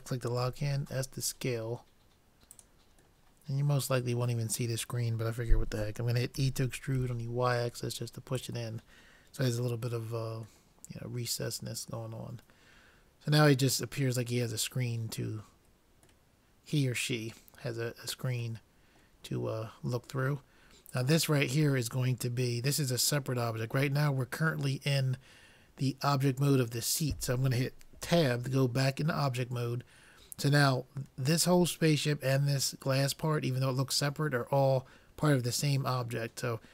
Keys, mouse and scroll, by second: 0.5 s, 3.3-5.0 middle drag, 6.4 e, 10.1-12.6 middle drag, 14.5-15.6 middle drag, 16.5-18.3 middle drag, 18.6-20.6 middle drag, 20.9-22.7 drag, 24.5-26.4 middle drag, 28.1 Tab.